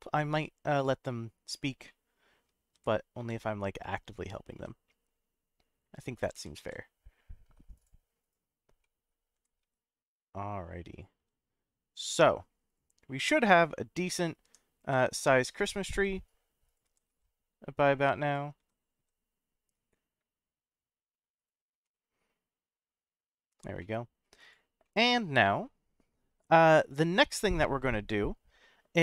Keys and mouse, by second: 0.9 middle click, 1.9-2.4 middle drag, 2.7 g, 3.2 z, 4.2 click, 4.6 s, 6.1 click, 6.3 g, 6.6 z, 7.7 click, 8.2 click, 8.8 middle click, 9.3 g, 9.6 z, 10.9 click, 11.2 s, 12.7 click, 13.4 click, 14.0 click, 14.4 g, 14.8 z, 15.6 click, 15.9 s, 16.6 click, 16.8 g, 17.1 z, 18.2 click, 18.6 s, 18.9 z, 21.4 right click, 21.8 s, 23.5 click, 23.8-24.2 middle drag, 24.8-25.6 middle drag.